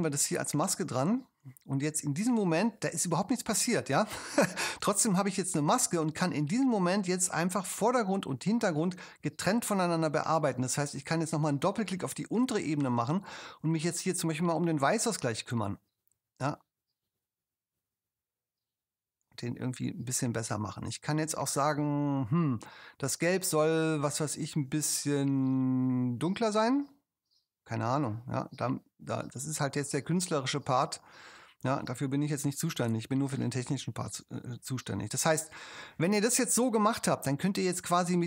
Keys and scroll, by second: 2.5 super+0.